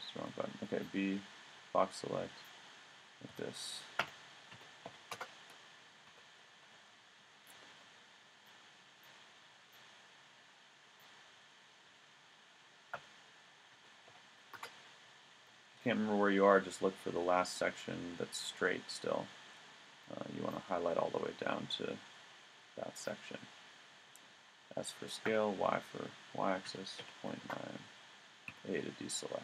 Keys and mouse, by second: 0.2 b, 3.3 s, 6.1 a, 6.6 v, 9.4 b, 11.9 s, 15.4 a, 20.0 b, 24.3 s, 28.5 a.